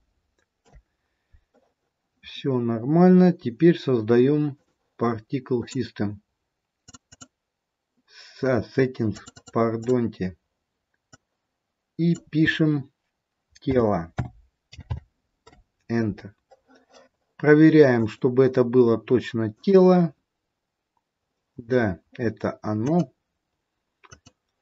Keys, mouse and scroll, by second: 4.6 click, 5.6 click, 7.5 click, 9.4 click, 17.9 click, 22.8 click.